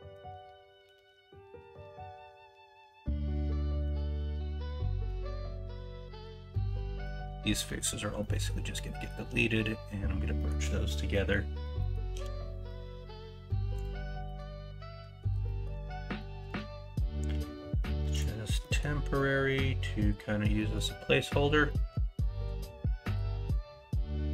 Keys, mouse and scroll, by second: 4.4 middle click, 5.1 middle click, 7.6 middle click, 7.7-8.3 scroll down 1, 8.3-9.0 scroll up 4, 10.3 middle click, 11.1 middle click, 11.3 scroll down 2, 11.7 middle click, 12.1 x, 14.2 middle click, 15.5 middle click, 18.6 middle click, 20.5 middle click, 21.6 middle click.